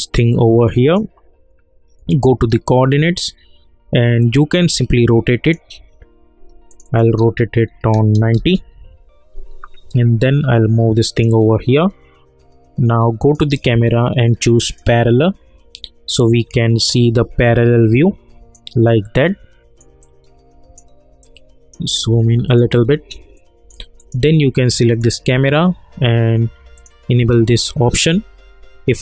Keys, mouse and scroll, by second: 4.5-5.7 drag, 8.3 Return, 9.9-13.2 drag, 16.3 scroll down 1, 17.4-18.8 alt+drag, 18.8 alt+middle click, 20.0 alt+click, 21.2 alt+right click, 22.0 alt+middle click, 22.7 alt+right click, 23.3 alt+middle click, 24.0 click.